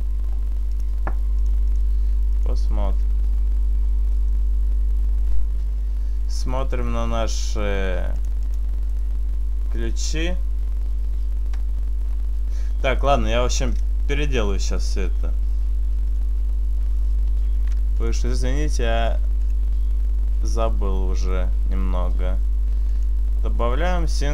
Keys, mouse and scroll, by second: 0.8 click, 2.5 click, 3.0 r, 5.0 right click, 6.8-7.4 scroll down 3, 8.2 click, 9.0 right click, 13.1 right click, 14.0 Delete, 15.0 right click, 16.0 click, 17.4 shift+s, 20.0 click, 24.0-24.3 scroll down 1.